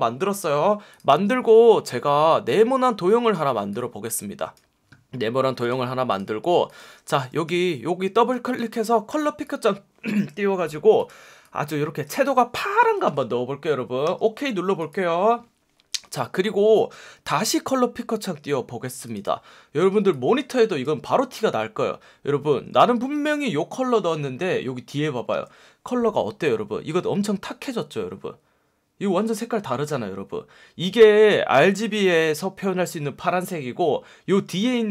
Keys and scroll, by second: 7.4 F1, 9.1 F1, 13.0 F1, 14.0 F1, 17.1 F1, 18.3 F1, 22.4 F1, 25.3 F1, 32.1 F1, 34.6 F1.